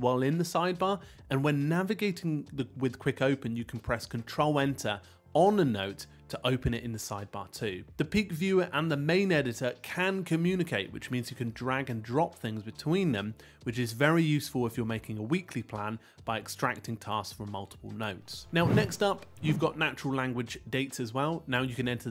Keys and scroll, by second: 2.3 super+Return, 12.4 super+o.